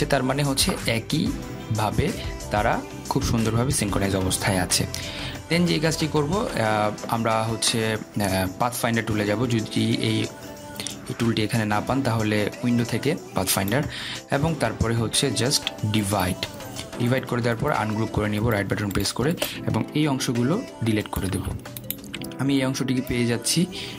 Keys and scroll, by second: 21.2 Delete.